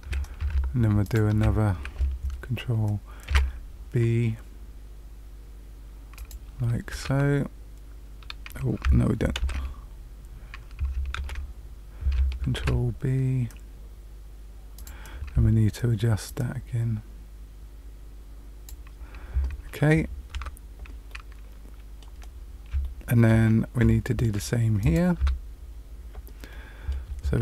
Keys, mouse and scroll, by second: 1.0 alt+shift+click, 3.2 ctrl+b, 6.9 Tab, 9.3 ctrl+z, 11.1 ctrl+z, 12.5 ctrl+b, 16.2 click, 20.3 Tab, 21.0 middle click, 22.2-22.8 scroll down 2, 22.8 shift+middle click, 24.0 shift+middle click, 24.7 click, 25.1 Tab, 26.4 middle click.